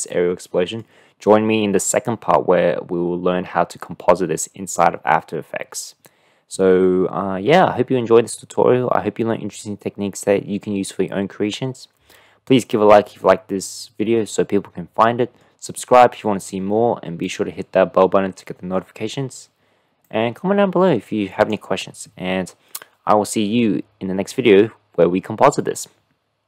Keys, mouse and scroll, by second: 13.5-15.6 middle drag, 15.8-16.7 middle drag, 17.3 click, 21.6-23.4 drag.